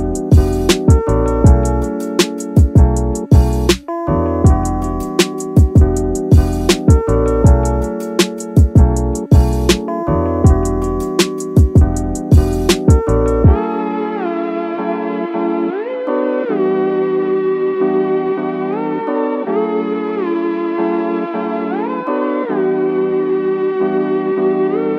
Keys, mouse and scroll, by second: 0.0 middle click, 0.3 scroll down 2, 0.6 middle click, 0.9 Tab, 1.1-1.5 middle drag, 1.1 scroll up 1, 2.3-4.0 drag, 4.0 middle drag, 4.4-4.8 scroll up 1, 5.6 click, 6.2-7.8 right drag, 7.8 middle drag, 8.2 scroll up 1, 8.3 scroll down 1, 8.5 middle click, 9.3 KP_1, 11.0 shift+d, 11.3 shift+right click, 12.1-13.7 drag, 14.4 s, 16.2 click, 17.1 click, 18.8 click, 19.1 middle drag, 19.5 scroll down 2, 19.8 middle drag, 20.2 middle drag, 20.6 scroll up 1, 20.7 scroll down 2, 20.9 middle drag, 21.9 KP_1, 22.8-23.2 scroll up 2, 23.5 shift+middle drag, 24.2-24.6 scroll down 2, 24.6 middle drag.